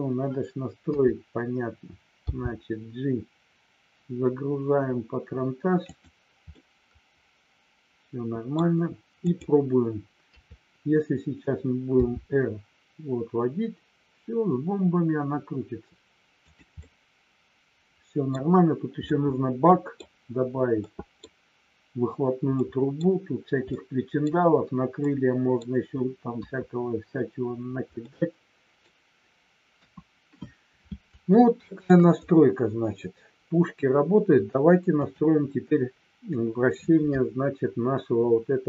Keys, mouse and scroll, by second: 0.8 KP_3, 2.1 g, 5.9 click, 6.5-8.5 middle drag, 9.2 click, 10.2 KP_3, 12.0 r, 16.8-18.2 middle drag, 19.0-20.0 middle drag, 20.9 middle click, 22.5 middle click, 23.6-24.2 scroll up 1, 25.1 middle click, 25.5-26.4 scroll down 1, 26.4 KP_1, 28.0 middle click, 29.8 KP_1, 31.2 shift+middle click, 34.9 click.